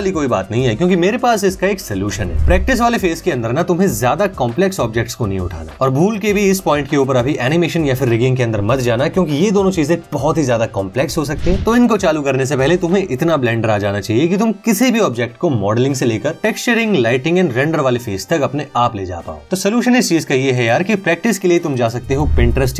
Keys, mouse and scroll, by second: 11.7 Tab, 11.9 g, 12.2 Tab, 12.7 click, 13.7 s, 14.1 click, 14.4 scroll down 1, 15.5 u, 19.1 Tab, 19.2 click.